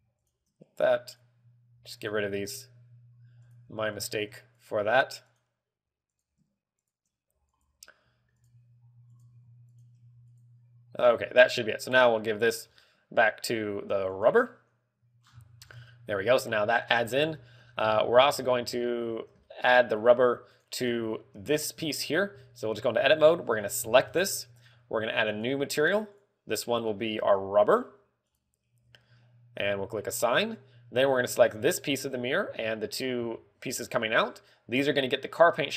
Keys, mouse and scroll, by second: 0.7 shift+click, 1.7 click, 3.9 click, 4.4 shift+click, 5.0 click, 6.9 click, 7.3 shift+click, 8.0 click, 15.7-16.7 scroll down 13, 16.6 middle click, 17.5-19.1 scroll up 10, 17.8 shift+middle click, 18.7 shift+middle click, 19.3 middle click, 20.0 shift+middle click, 20.0 z, 21.4 right click, 21.5-24.3 typing, 22.4 Tab, 25.8 click, 26.6 click, 27.0 click, 30.6 click, 31.7 a, 32.2 l, 33.0 l, 33.7 l.